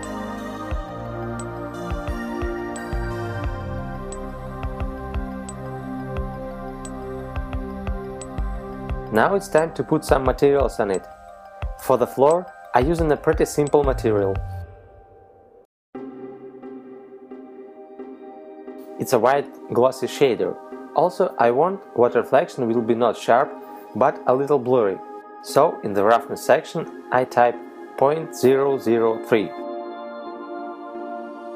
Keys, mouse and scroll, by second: 0.3 middle click, 1.4 Tab, 2.0-2.7 scroll down 4, 3.5 shift+middle click, 8.0 right click, 8.6 middle click, 10.1 click, 13.4 click, 14.3 click, 18.6 click, 23.7 click.